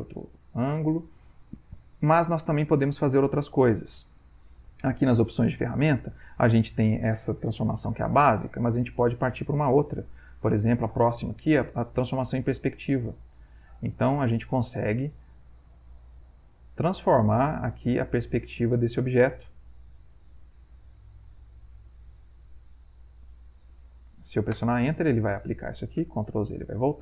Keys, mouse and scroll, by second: 2.2-3.2 drag, 9.4 click, 12.6-13.7 drag, 14.1-15.6 drag, 16.6-18.8 drag, 20.3 click, 21.5 click, 24.6 Return, 26.0 ctrl+z, 26.6 ctrl+v.